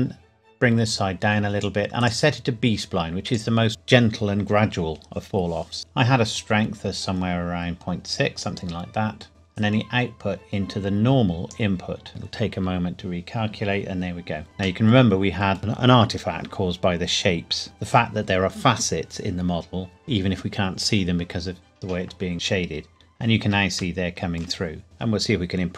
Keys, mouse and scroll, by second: 5.8-6.4 scroll up 2, 6.4 click, 14.8 middle click, 17.6 middle click, 22.3-23.8 scroll up 1, 24.0 shift+middle click, 24.8-25.7 scroll down 1.